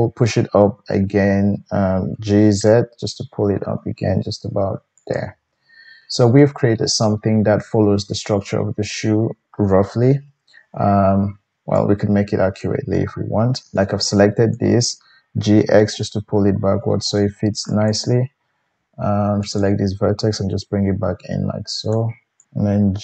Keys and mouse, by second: 2.1 g, 5.6-11.7 middle drag, 10.1 KP_1, 11.7-17.9 drag, 15.3 g, 17.9-19.5 middle drag, 19.5 click, 19.6-22.4 middle drag, 20.4 g, 22.4-23.0 drag.